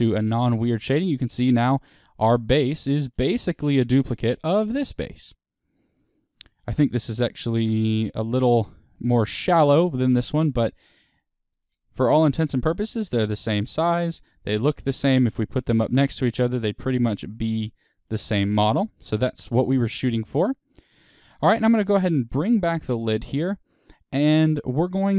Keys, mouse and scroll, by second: 1.2-1.7 scroll down 2, 3.8 click, 4.1-7.0 middle drag, 7.0 click, 7.4-14.4 middle drag, 11.6 KP_1, 14.4-16.2 scroll down 2, 16.2-20.9 middle drag, 18.2-18.5 scroll up 2, 19.4-20.9 scroll down 2, 20.9 click, 21.5-22.7 middle drag, 22.7 click, 23.3 Tab, 23.9-25.1 middle drag.